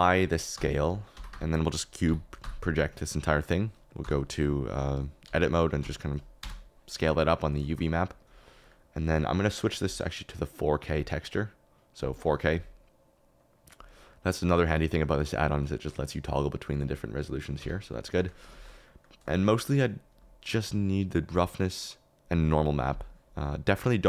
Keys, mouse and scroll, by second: 0.1 ctrl+a, 1.1 Tab, 1.3 a, 2.0 u, 5.2 a, 5.8 s, 6.4 Tab, 7.5 shift+middle click, 7.9 middle click, 8.2 KP_Decimal, 12.1-15.1 middle drag, 17.5 Escape, 18.2 click, 20.7-23.3 middle drag.